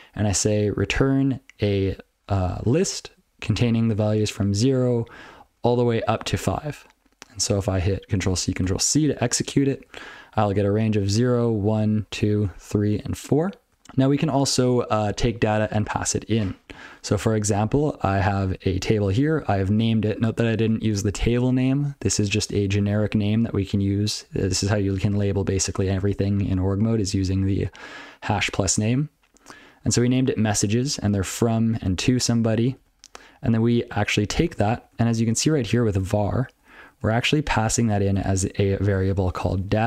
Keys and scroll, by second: 0.1 ctrl+b, 0.2 ctrl+f, 0.3 ctrl+b, 0.4 ctrl+b, 1.0 ctrl+f, 1.5 ctrl+f, 2.2 ctrl+f, 2.3 ctrl+b, 2.5 ctrl+b, 2.8 ctrl+f, 3.5 ctrl+f, 4.6 ctrl+f, 4.8 ctrl+b, 4.9 ctrl+f, 5.4 ctrl+f, 5.7 ctrl+f, 6.3 ctrl+f, 8.6 ctrl+f, 8.9 ctrl+c, 9.5 ctrl+n, 9.7 ctrl+n, 9.8 ctrl+n, 10.0 ctrl+a, 10.5 ctrl+n, 10.7 ctrl+a, 10.8 ctrl+f, 11.3 ctrl+f, 11.5-13.0 ctrl+f, 13.7 ctrl+n, 13.8 Tab, 14.1 ctrl+n, 17.5 ctrl+n, 18.5 ctrl+n, 18.8 ctrl+n, 19.0 ctrl+p, 19.2 ctrl+p, 19.7 ctrl+p, 19.9 ctrl+f, 20.1 ctrl+f, 20.3 ctrl+n, 20.6 ctrl+p, 21.2 ctrl+alt+f, 22.1 ctrl+alt+b, 22.5-22.8 ctrl+f, 24.5 ctrl+a, 26.9 ctrl+f, 27.0 ctrl+a, 29.8 ctrl+p, 29.9 ctrl+f, 30.3 ctrl+n, 30.7 ctrl+a, 30.8 ctrl+n, 31.3-31.7 ctrl+f, 31.8 ctrl+n, 32.0 ctrl+f, 32.3 ctrl+n, 32.5 ctrl+n, 32.7 ctrl+n, 34.8 ctrl+e, 34.9 ctrl+p, 36.9 ctrl+e, 37.4-37.8 ctrl+b, 38.0 ctrl+b, 38.5 ctrl+b, 39.2 ctrl+f, 39.4 ctrl+f.